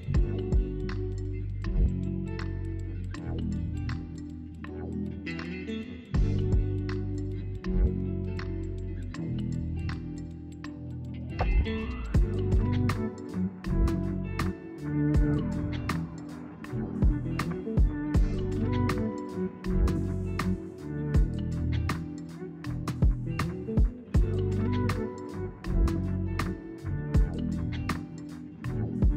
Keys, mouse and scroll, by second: 2.7-5.7 drag, 5.9 alt+click, 7.7 alt+shift+click, 8.5 alt+shift+click, 9.1 alt+shift+click, 9.5 alt+shift+click, 10.0 alt+shift+click, 11.1 alt+shift+click, 12.3 alt+shift+click, 14.0 alt+shift+click, 14.5 scroll down 2, 14.7-16.0 middle drag, 16.0 ctrl+z, 16.4-19.1 middle drag, 19.1 scroll up 1, 19.3-20.4 middle drag, 20.4-21.4 scroll up 1, 21.4 shift+d, 28.5 p.